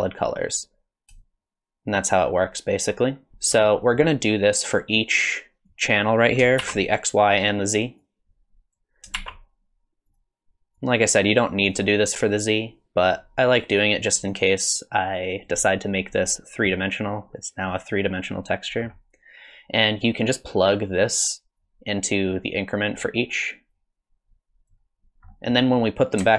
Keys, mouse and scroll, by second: 1.2 shift+click, 3.5-3.8 scroll down 3, 3.8 middle click, 4.7 click, 5.7 click, 6.2 click, 6.7 shift+d, 8.0 click, 9.1 shift+d, 10.8 click, 12.3 click, 13.6 click, 14.6 click, 18.4 middle click, 19.5 click, 20.7 click, 21.6 click, 23.7 click, 25.3 middle click.